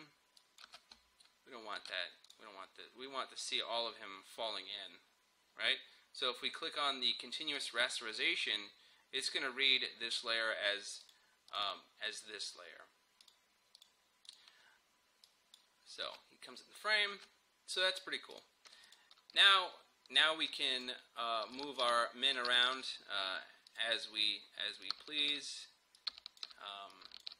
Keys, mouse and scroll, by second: 0.7 space, 2.3 click, 7.6 click, 11.1 click, 16.1 space, 18.4-21.6 drag, 21.6-27.3 shift+drag.